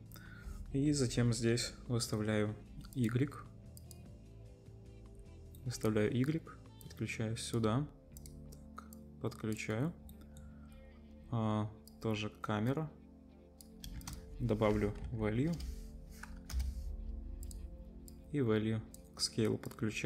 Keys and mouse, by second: 2.9-8.3 drag, 8.3 middle click, 8.9-17.5 drag, 13.9 shift+a, 17.5-18.1 middle drag, 18.1-20.0 drag.